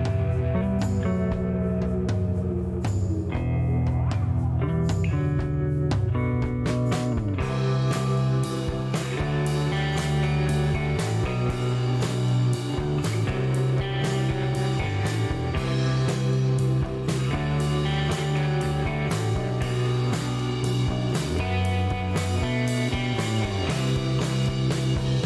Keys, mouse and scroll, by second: 0.0 middle click, 0.5 shift+right click, 3.0 click, 4.3 click, 5.3-5.7 scroll up 2, 6.0 middle click, 6.5 scroll up 1, 6.8 middle click, 9.3 click, 10.5 click, 10.9 right click, 12.1 click, 13.6 click, 15.5 click, 16.0 right click, 17.5 click, 20.3 click, 21.7-22.6 typing, 23.3 click, 24.1 scroll down 1, 24.7 shift+right click.